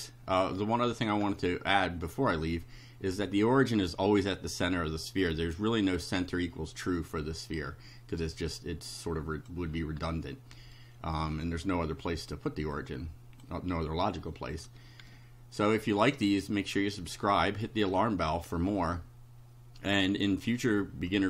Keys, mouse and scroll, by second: 0.8-1.6 scroll down 4, 7.2-7.9 scroll down 4, 8.2 right click, 9.1 click, 9.7-10.2 scroll up 4, 10.8 right click, 11.8 click, 12.8 click, 14.6 shift+click, 15.1 shift+right click.